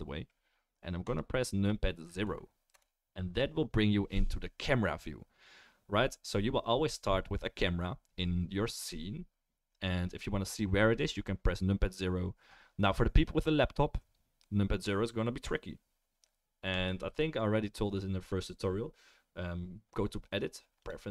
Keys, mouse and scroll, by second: 2.4-21.1 right drag, 2.7 KP_0, 16.7-21.1 drag, 16.7-21.1 middle drag.